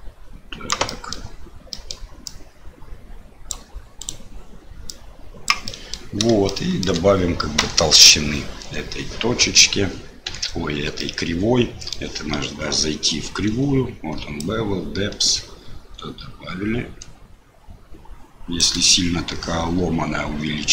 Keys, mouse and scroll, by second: 1.0 middle click, 1.8 middle click, 2.4-4.0 drag, 4.9 click, 5.7 middle click, 6.6 shift+middle click, 7.7 middle click, 10.2 KP_Decimal, 11.0-12.0 drag, 14.5-18.6 shift+drag.